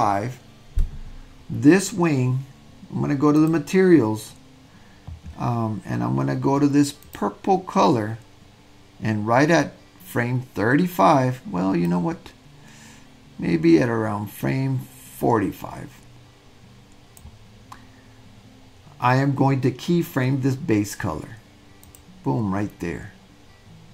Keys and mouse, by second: 3.5 click, 7.0 click, 12.0-17.3 drag, 21.9 click.